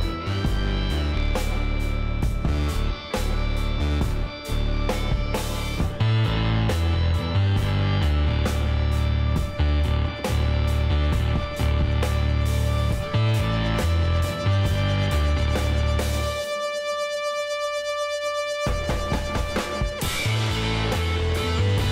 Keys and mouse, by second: 4.3-7.2 middle drag, 5.9 Tab, 6.7 KP_1, 8.1 s, 11.4 s, 14.0-19.4 drag, 20.5 e.